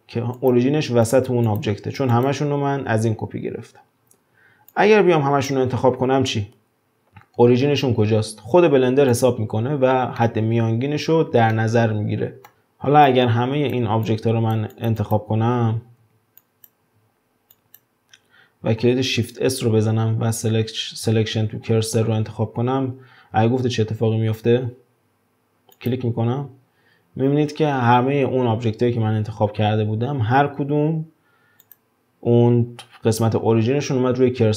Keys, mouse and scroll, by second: 0.4 click, 1.0 click, 1.4 click, 2.1 click, 4.7 drag, 9.1 click, 10.2-12.5 middle drag, 12.5 click, 13.1 drag, 14.1 drag, 14.7 drag, 15.0 drag, 16.0 w, 16.4 click, 17.5 click, 19.1 shift+s, 27.0-27.8 scroll up 1, 27.8-30.3 scroll up 1, 31.6 click.